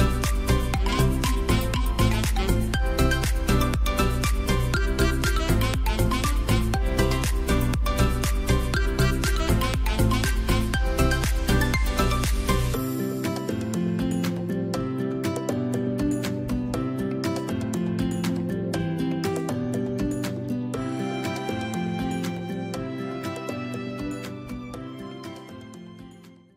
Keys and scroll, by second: 3.7 space, 7.2 ctrl+g, 12.7 space, 13.6 space, 14.7 t, 15.7 5, 17.2 7, 18.0 8, 18.4 Escape, 18.6 space.